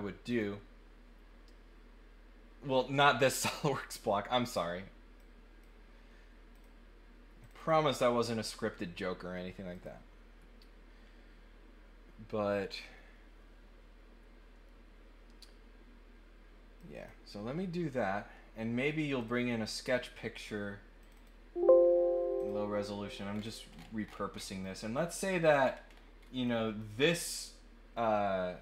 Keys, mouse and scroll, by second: 0.3 click, 5.1 click, 6.5 click, 7.4 click, 7.5 click, 9.7 click, 16.7 click, 19.2 click, 21.0 click, 22.3 click, 23.3-24.4 scroll down 4, 24.6 click, 25.5 scroll down 1, 26.1 scroll up 1, 26.4 click.